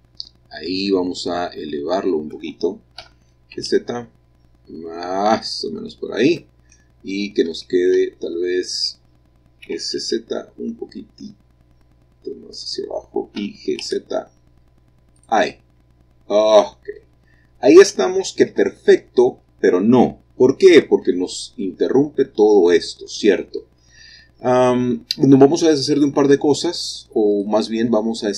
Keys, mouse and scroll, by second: 3.0 g, 3.5 z, 5.4-7.1 drag, 7.1-8.1 scroll up 1, 9.6 s, 10.0 z, 12.6 click, 13.4 g, 13.8 z, 15.1 click, 15.5 middle click, 15.7 click, 15.8 middle click, 15.9 middle click, 17.2-19.9 scroll down 2, 20.4-21.6 scroll up 2, 23.5-26.2 middle drag, 27.3 click.